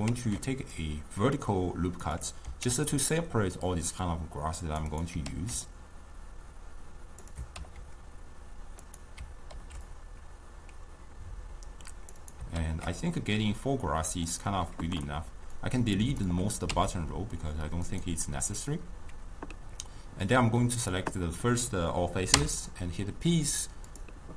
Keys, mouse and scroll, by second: 0.2 ctrl+r, 2.7 ctrl+r, 7.6 ctrl+b, 12.6 ctrl+b, 15.6 click, 16.8 x, 20.5 click.